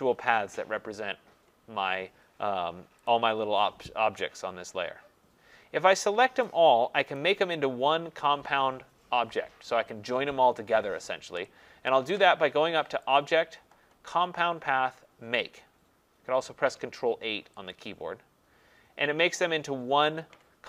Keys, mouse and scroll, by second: 3.1 click, 6.0 click, 7.2 click, 13.2 click, 17.7 click.